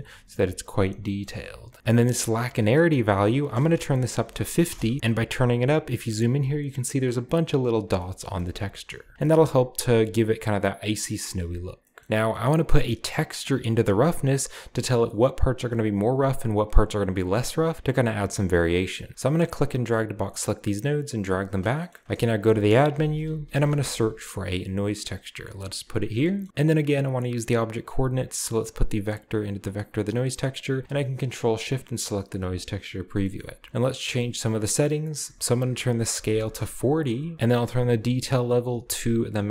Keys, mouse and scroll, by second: 1.7 ctrl+z, 1.7-2.2 scroll down 1, 2.8 click, 4.1 typing, 4.7 Return, 7.2-9.1 scroll down 2, 8.2-8.6 shift+middle drag, 8.7 shift+middle click, 12.0-12.5 scroll down 1, 12.4-13.3 middle drag, 12.5-13.3 scroll up 1, 13.3-14.9 scroll up 1, 13.7-16.1 drag, 16.0 right click, 16.9-17.7 scroll down 1, 18.3-19.1 scroll down 1, 19.1-19.9 drag, 22.0-23.5 typing, 22.3 shift+click, 23.7 Return, 25.5 click, 27.8-29.9 drag, 30.5 click, 32.1 ctrl+shift+click, 32.5 click, 33.2 middle click, 33.3-33.9 scroll up 2, 33.4 click, 35.1 click, 36.2 typing, 36.5 Return, 37.4 click, 38.0 1, 38.6 5.